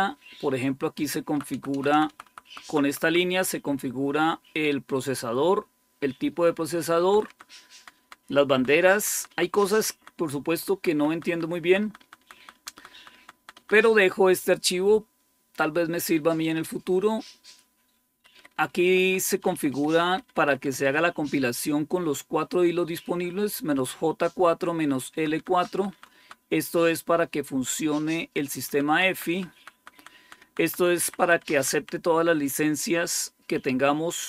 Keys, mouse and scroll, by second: 0.0-1.4 Right, 1.6 Right, 1.8 Right, 2.0 Right, 2.3 Right, 2.5 Right, 2.7 Right, 2.9 Right, 6.8 Down, 7.1 Down, 7.6 Down, 7.9 Down, 8.1 Down, 8.6 Down, 8.8 Down, 9.0 Down, 9.2 Down, 9.4 Down, 9.6 Down, 9.8 Down, 10.0 Down, 10.2 Down, 10.4 Down, 10.6 Down, 10.8 Down, 11.0 Down, 11.3 Down, 11.5 Down, 11.7 Down, 11.9 Down, 12.2 Down, 12.4 Down, 12.6 Down, 12.8 Down, 13.0 Down, 13.2 Down, 13.4 Down, 18.0 Up, 18.2 Up, 18.4 Up, 18.6 Up, 18.8 Up, 19.1 Up, 19.4 Up, 19.6 Up, 19.8 Up, 20.1 Up, 20.3 Up, 20.5 Up, 20.7 Up, 25.0 Down, 25.2 Down, 25.4 Down, 25.6 Down, 25.8 Down, 26.3 Down, 28.5 Down, 29.0 Down, 29.2 Down, 29.4 Down, 29.6 Down, 29.8 Down, 30.0 Down, 30.5 Down, 30.9 Up, 31.1 Up, 31.2 Up, 31.4 Up, 31.6 Up.